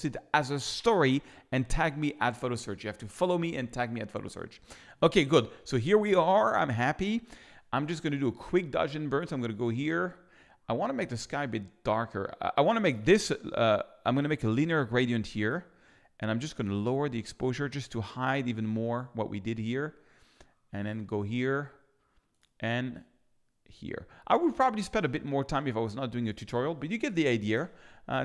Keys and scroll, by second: 27.0 i.